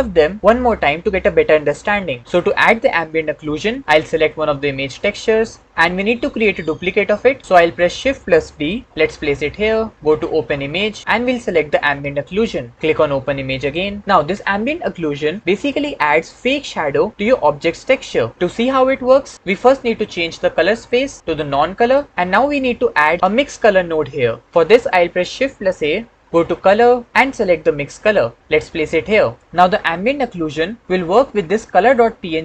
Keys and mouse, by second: 3.3 shift+click, 4.9 click, 5.9-7.3 drag, 7.5 click, 8.5 shift+d, 10.6 click, 20.7-21.8 drag, 22.7 shift+click, 25.5 shift+a.